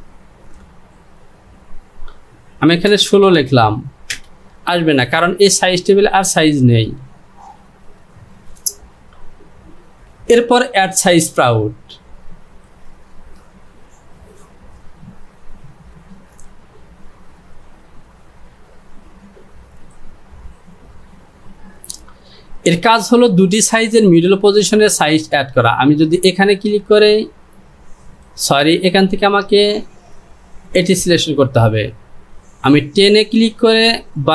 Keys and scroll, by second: 3.0 KP_1, 3.3 KP_6, 4.2 Return.